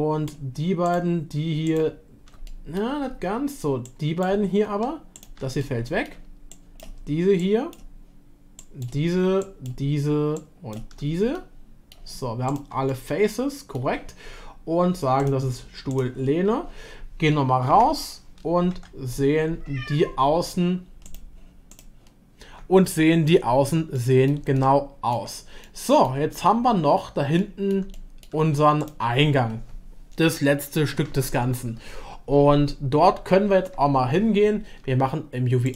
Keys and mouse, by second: 2.5-3.4 middle drag, 4.0-5.1 shift+drag, 5.6-6.2 middle drag, 6.5 shift+drag, 7.4-7.8 shift+drag, 8.6 shift+drag, 9.4-9.8 shift+drag, 10.3-10.7 shift+drag, 11.4-11.9 middle drag, 12.5 shift+click, 12.9-13.8 middle drag, 15.2-15.8 drag, 17.7 /, 18.7 Tab, 21.0 click, 21.7 click, 24.0 middle click, 24.5 shift+middle click, 25.6 middle click, 27.4 middle click, 27.9-28.2 shift+middle drag.